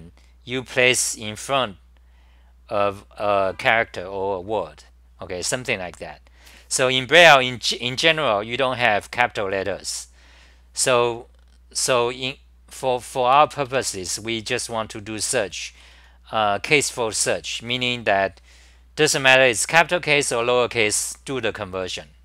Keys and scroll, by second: 13.6 ctrl+g, 14.6 1, 15.7 ctrl+g, 16.4-17.6 typing.